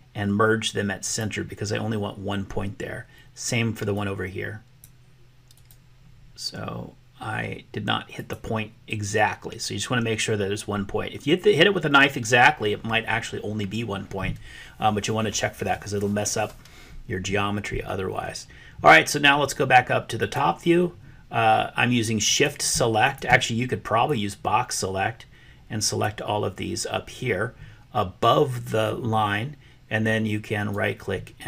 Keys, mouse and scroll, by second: 1.1 right click, 4.0-5.0 drag, 5.5-8.3 drag, 8.3 right click, 20.1 click, 22.2 click, 23.1 shift+click, 24.1-26.0 drag, 30.5-31.4 right drag.